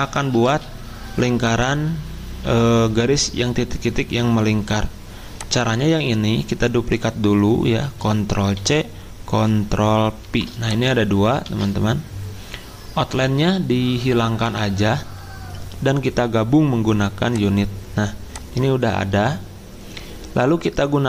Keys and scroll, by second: 0.4 ctrl+z, 5.7 ctrl+z, 8.5 ctrl+c, 10.2 ctrl+v, 11.4 ctrl+z, 19.0 ctrl+z.